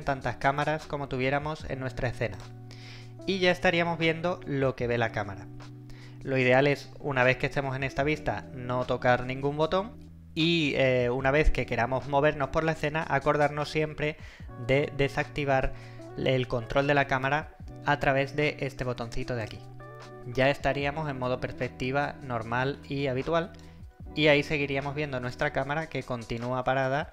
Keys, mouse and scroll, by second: 2.4 click, 19.4 click, 20.4 right click, 20.5-23.9 typing, 25.2-26.5 typing, 25.3 right click.